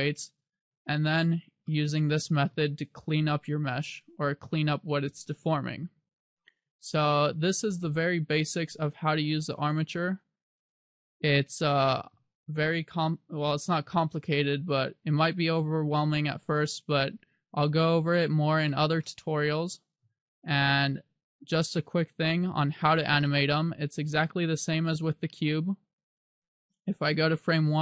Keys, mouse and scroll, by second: 2.0 shift+middle click, 3.8 r, 7.1 right click, 10.2 click, 10.7 click, 18.3-19.2 scroll down 1, 19.2 shift+middle click, 21.0 right click, 22.6 scroll up 1, 23.4 shift+middle click, 25.5 click.